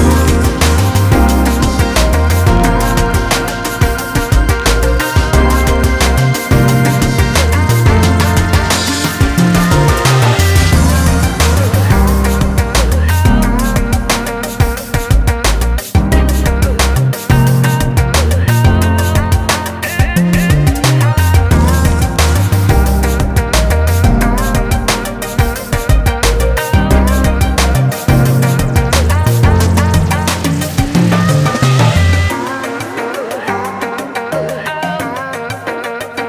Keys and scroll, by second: 1.6-3.0 typing, 3.3 Return, 16.5 ctrl+t.